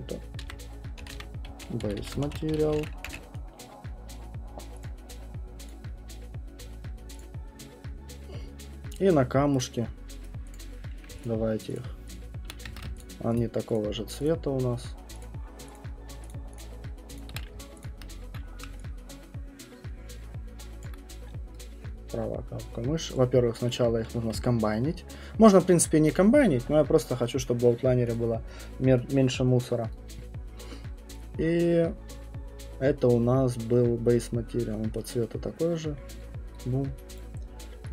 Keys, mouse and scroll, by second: 0.4-3.2 typing, 4.8 click, 5.6 click, 5.6 typing, 7.2 click, 9.5 right click, 10.2 right click, 10.5 click, 11.1 middle click, 11.2 shift+click, 11.7 shift+click, 12.1 shift+click, 12.8 ctrl+z, 13.0 shift+click, 13.4 shift+click, 13.7 shift+click, 15.7 shift+click, 17.9 ctrl+click, 18.6 scroll, 19.3 shift+right click, 19.3 middle click, 19.7 shift+click, 21.0 click, 23.6 right click, 26.0 shift+right click, 28.1 click, 36.1 right click, 37.0 right click, 37.2 click, 37.4-37.8 scroll.